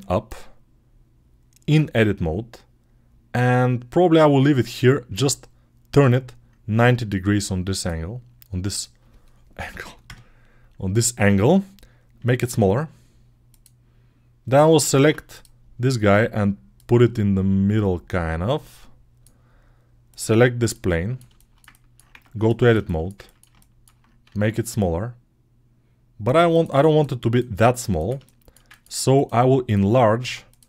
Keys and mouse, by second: 0.1-12.8 drag, 12.0 s, 12.8 right click, 13.4-15.2 middle drag, 14.8 ctrl+Tab, 15.2 right click, 15.3-16.6 middle drag, 16.6 right click, 16.7-20.0 drag, 20.0-29.0 middle drag, 21.9 Tab, 24.1 s, 29.0 click, 29.1 middle click, 29.5 click, 29.6 middle click, 30.1 ctrl+Tab, 30.3 click, 30.4-30.6 middle drag.